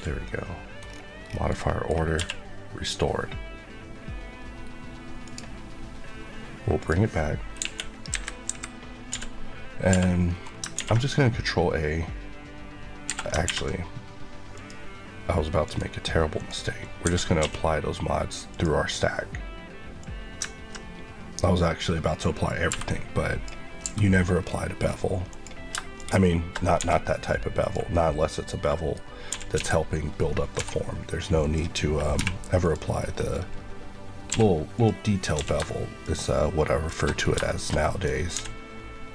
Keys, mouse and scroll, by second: 0.1 middle click, 0.7 scroll down 1, 1.4 middle click, 2.0 q, 5.1 click, 7.5 click, 8.0 KP_3, 8.4 KP_Decimal, 9.0 d, 9.8 Escape, 10.2-10.5 scroll up 1, 10.7 ctrl+a, 13.0 Escape, 13.4 ctrl+`, 14.5 click, 15.5 click, 16.9 Escape, 17.3 q, 18.4 click, 22.6 b, 23.7 b, 24.3 scroll down 1, 25.2 click, 26.7 click, 26.7 g, 27.5 click, 27.9 middle click, 28.9 scroll up 1, 29.2-30.4 typing, 31.3 click, 32.1 h, 32.5 click, 32.9 scroll up 1, 34.2 q, 34.6 click, 35.3 q, 35.9 click, 37.4 middle click, 38.0 scroll up 1, 38.2 d.